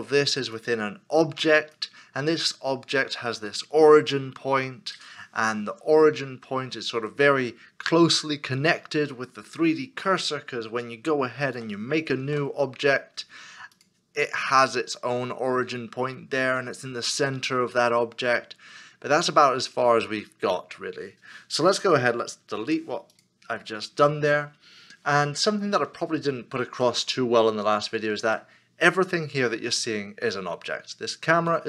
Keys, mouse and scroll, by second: 10.3 shift+right click, 12.2 shift+a, 22.6 x, 25.9 scroll down 1, 27.0 middle click.